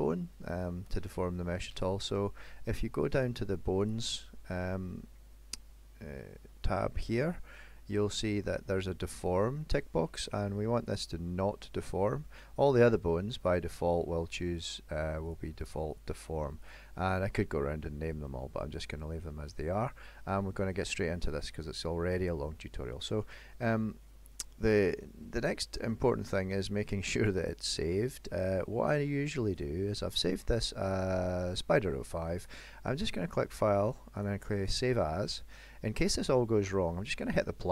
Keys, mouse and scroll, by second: 3.9 click, 10.9 click, 12.7 click, 13.7 click, 15.4 click, 16.0 click, 16.7 click, 18.3-18.8 scroll down 3, 18.9 middle click, 20.5 shift+middle click, 21.0 middle click, 21.7 shift+middle click, 22.5-23.3 scroll up 1, 23.3 middle click, 26.1 middle click, 28.6 click, 32.5 click.